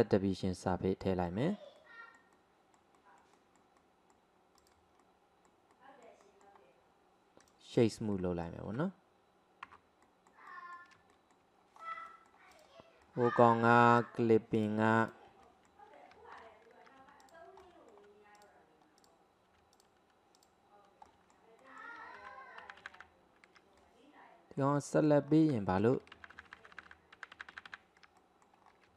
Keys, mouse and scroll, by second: 0.8-4.6 middle drag, 4.6 click, 5.0-7.4 middle drag, 7.4 right click, 8.2-9.7 middle drag, 9.7 Tab, 10.1-11.8 middle drag, 11.8-12.1 scroll up 1, 12.1 shift+middle click, 12.6 click, 13.0 middle click, 14.0 click, 14.6 click, 15.0 alt+click, 15.5-16.4 middle drag, 16.4 ctrl+z, 17.2 alt+click, 17.6-18.4 middle drag, 18.4 alt+click, 19.0 alt+click, 19.8 alt+click, 20.4 alt+click, 21.1 alt+middle click, 21.6-22.2 middle drag, 22.2 ctrl+z, 22.6 ctrl+z, 22.8 ctrl+z, 23.0 ctrl+z, 23.8-25.3 middle drag, 25.3-25.7 scroll up 1, 25.7-26.2 shift+middle drag, 26.2-27.0 ctrl+z, 27.4 ctrl+z, 28.2-28.7 middle drag, 28.7-28.9 scroll down 3.